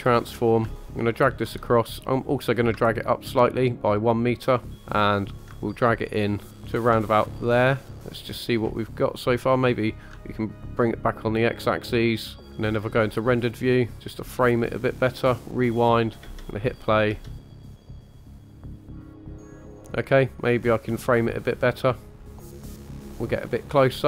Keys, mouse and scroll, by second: 0.6 shift+click, 2.7-4.7 ctrl+drag, 5.4-6.7 ctrl+drag, 7.4-7.8 shift+middle drag, 9.9 click, 12.6 scroll down 2, 13.8 click, 15.5-15.8 drag, 16.2-18.5 typing, 18.7 click, 19.0 click, 19.2-19.6 drag, 19.7-20.1 scroll down 1, 20.8 click, 22.2-24.0 ctrl+shift+drag.